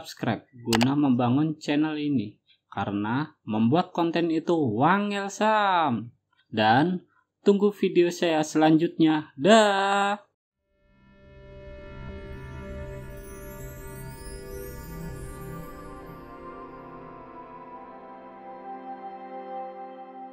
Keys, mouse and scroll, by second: 0.5 Escape.